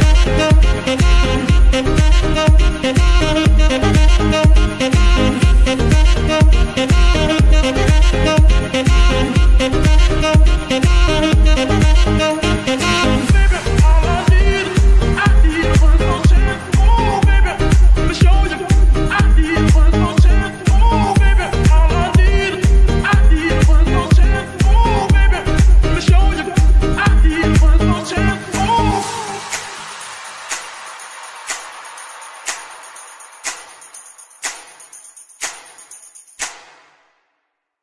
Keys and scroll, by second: 4.8 ctrl+p, 5.6 Return, 7.6 g, 8.2 Escape, 8.6 g, 22.8 shift+n, 26.0 shift+n, 32.6 F2, 34.6-35.3 typing, 36.8 BackSpace, 37.7 Return.